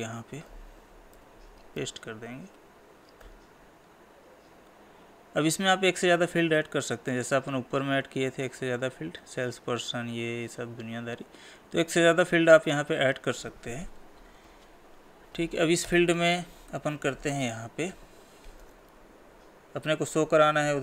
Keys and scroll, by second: 1.2 ctrl+v.